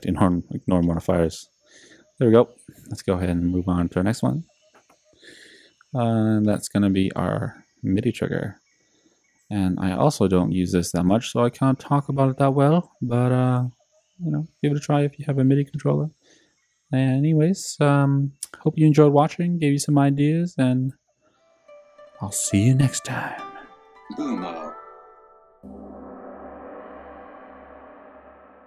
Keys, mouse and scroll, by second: 6.3 click, 6.5 click, 15.8 alt+-, 23.8 ctrl+alt+super+t.